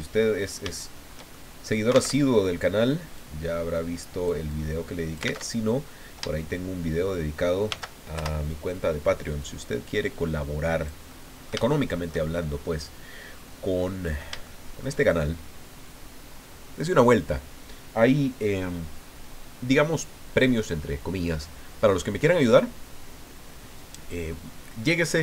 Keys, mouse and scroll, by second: 0.3 scroll down 2, 0.7 shift+click, 1.3 shift+click, 2.1 alt+Tab, 3.2-4.4 drag, 4.5 click, 5.4 alt+Tab, 6.3 shift+click, 7.7 shift+d, 8.1 shift+Return, 9.4-12.2 drag, 12.3-12.7 shift+scroll up 3, 13.3 scroll down 2, 13.8 click, 14.4 shift+click.